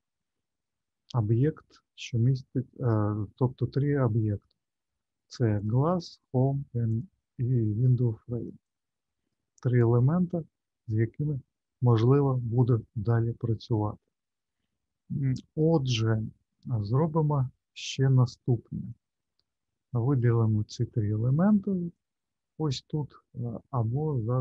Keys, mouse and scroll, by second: 5.6 click, 6.1 click, 6.8 click, 8.6 click, 15.5 click, 17.2-18.4 scroll down 1, 18.4 middle click, 19.9 click, 21.9 click.